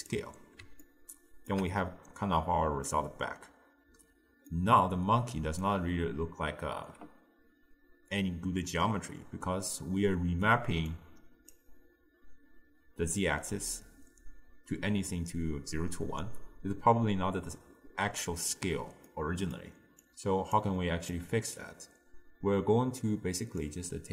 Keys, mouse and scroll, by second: 0.9-7.7 ctrl+middle drag, 9.9-10.9 middle drag, 10.9 click, 19.1 middle click, 20.1 click, 21.2 click, 23.6 click.